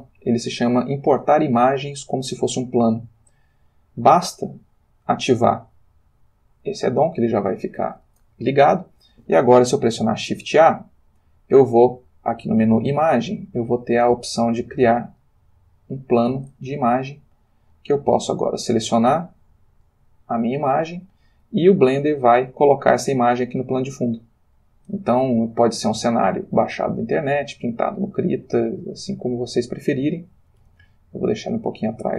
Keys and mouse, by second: 4.4 click, 7.6 click, 10.4 shift+a, 15.2 click, 17.7 click, 19.1 click, 19.8 click, 22.4-23.1 drag, 23.1 s, 25.7 click, 25.7 g, 27.4 click, 27.9-29.6 middle drag, 30.7 y, 31.5 click.